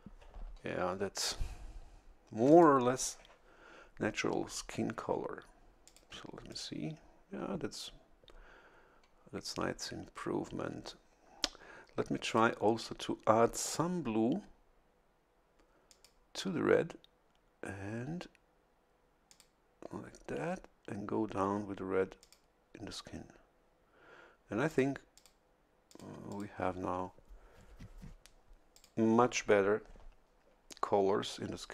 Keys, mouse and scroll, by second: 2.5 click, 5.8 click, 6.5 click, 12.3 click, 15.9 click, 19.3 click, 22.2 click, 24.7 click, 25.1 click, 25.9 click, 26.3 click, 28.7 click.